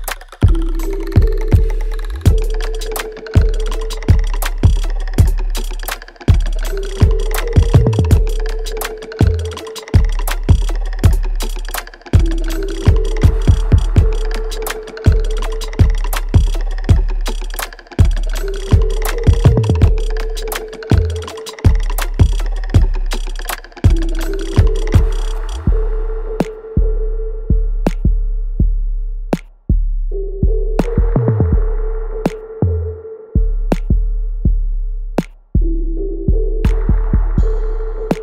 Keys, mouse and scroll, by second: 0.7-2.0 scroll down 1, 2.0 middle click, 5.3 click, 11.6 Escape, 11.7-12.2 scroll, 13.1 scroll down 1, 13.3 l, 14.6 l, 17.4 middle click, 21.3 click, 22.2 Escape, 22.5 middle click, 24.3 click, 25.9 Escape, 26.9 l, 27.4 x, 28.6 click, 30.5 Escape, 30.9 click, 33.6 Escape, 34.4-34.9 scroll down 1, 35.7 Escape, 36.0 click.